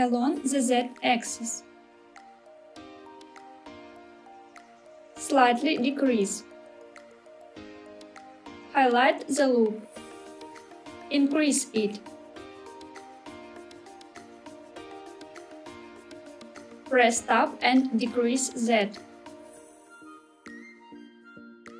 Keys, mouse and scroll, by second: 0.1 z, 4.4 click, 4.7 s, 7.9 click, 8.2 middle click, 8.2 scroll up 2, 8.4 click, 8.5 click, 9.6-10.9 middle drag, 12.1 s, 15.4 click, 15.9-16.5 scroll down 3, 16.5 middle click, 17.1 Tab, 18.7 s, 19.6 z.